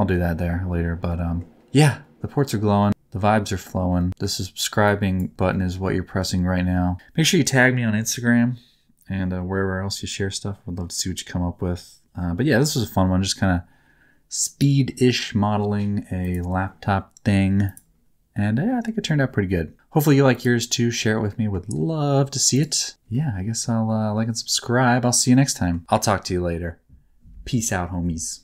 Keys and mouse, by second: 16.2 click, 17.6 click, 20.2 click, 21.4 middle click, 22.5 click, 23.1 middle click, 25.4 middle click.